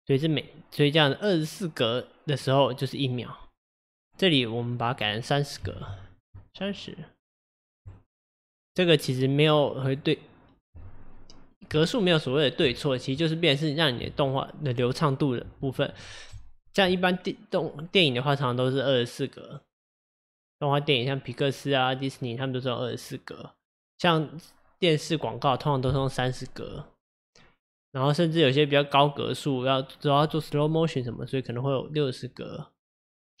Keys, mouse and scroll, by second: 0.8-5.7 drag, 5.7 KP_0, 7.9-33.4 drag.